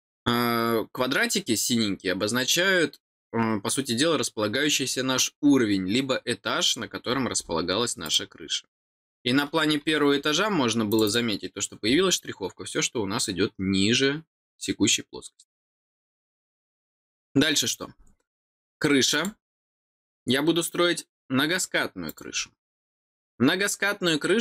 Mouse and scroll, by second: 6.7 scroll down 1, 7.1 middle click, 7.3 middle click, 8.0 click, 10.8 click, 11.0 click, 11.8 middle click, 15.6-16.0 scroll down 4, 16.5 middle click, 19.1 click, 22.0 click.